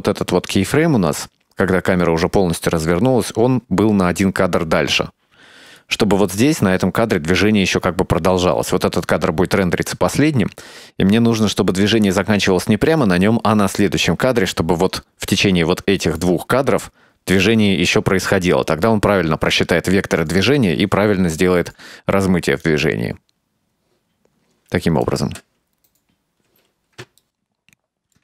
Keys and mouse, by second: 3.1 g, 8.4 click, 22.7-25.1 drag, 25.3 space, 26.6 space, 27.3 middle click.